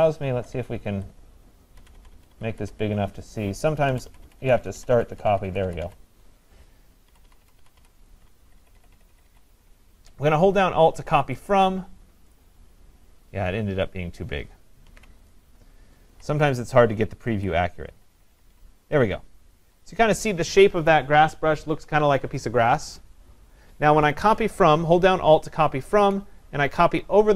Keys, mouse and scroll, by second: 0.0-2.7 typing, 0.2-1.8 drag, 3.9-5.8 typing, 7.1-9.3 typing, 11.5 alt+click, 12.3 click, 14.9 ctrl+z, 16.2-18.6 typing, 19.7 ], 26.0 alt+click.